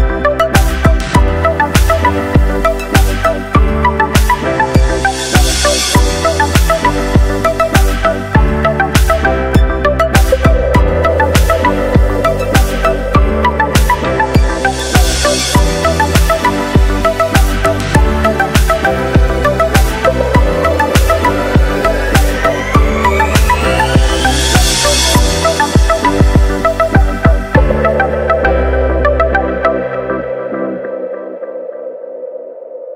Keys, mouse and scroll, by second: 0.2-4.7 drag, 6.0-7.2 scroll down 2, 7.2-8.1 scroll down 1, 8.1-9.0 scroll down 1, 9.0-9.7 scroll up 1, 9.7-11.8 scroll up 1, 12.2-13.1 scroll up 1, 13.1-15.0 scroll up 4, 15.0-17.3 scroll up 9, 17.3-19.4 drag, 20.0-22.0 middle drag, 22.2 click, 22.8-25.8 drag, 25.8-26.9 middle drag, 26.9 scroll up 1, 29.0 scroll up 4, 29.4-30.7 scroll down 4, 30.7 click, 31.6 click, 32.5-32.9 scroll down 2.